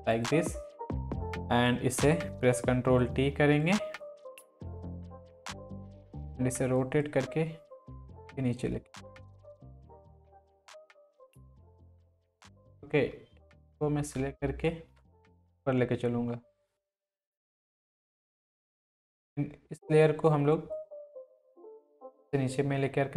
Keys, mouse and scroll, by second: 2.5 ctrl+t, 3.6 click, 4.5 ctrl+t, 5.4-6.0 drag, 17.4 ctrl+z, 17.7-19.0 drag.